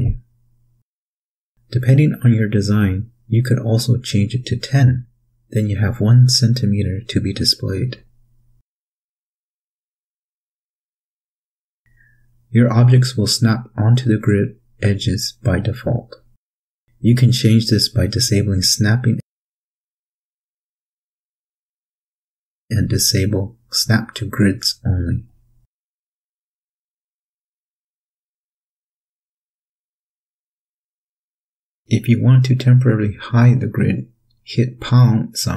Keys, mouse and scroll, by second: 0.7-1.4 drag, 5.1 KP_1, 5.3 KP_0, 6.2 KP_Enter, 9.8 click, 11.6-13.2 drag, 13.6-15.1 drag, 16.0 click, 17.7 click, 19.2-20.9 drag, 22.4 click, 24.0 click, 26.9-27.4 drag, 27.6-28.1 drag, 28.8 click, 34.3 #.